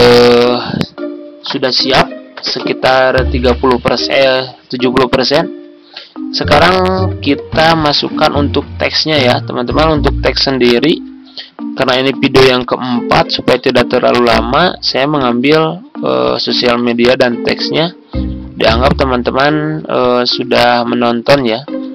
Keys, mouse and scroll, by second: 18.8 shift+click, 19.9 ctrl+click, 20.4 ctrl+click, 21.3 ctrl+click.